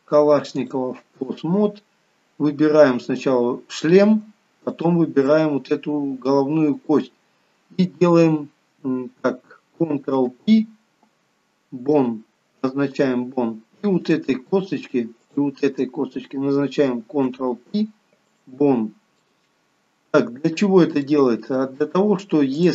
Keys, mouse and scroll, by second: 1.5-2.1 scroll down 2, 3.3 click, 4.9 shift+click, 14.2 click, 15.4 shift+click, 17.4 ctrl+p, 19.4 middle click, 22.0 middle click.